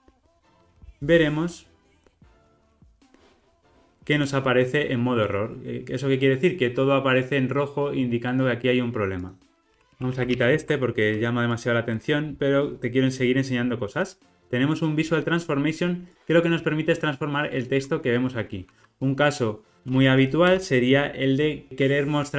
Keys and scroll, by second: 0.7 ctrl+r, 9.6 super+z, 10.4 super+z, 11.5 super+z, 15.2 alt+super+[, 20.4 Return.